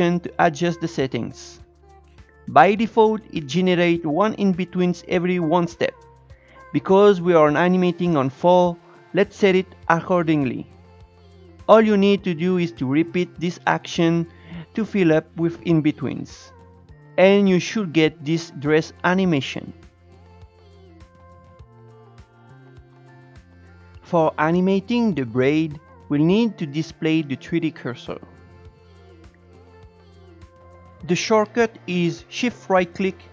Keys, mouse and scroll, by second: 2.2-12.0 drag, 12.0 ctrl+shift+e, 13.3 click, 13.8 ctrl+shift+e, 14.6 click, 15.4 ctrl+shift+e, 15.8 scroll down 3, 16.0-20.1 drag, 23.6-27.1 shift+middle drag, 27.1-29.2 drag, 31.0 shift+right click, 32.9-33.3 shift+right drag.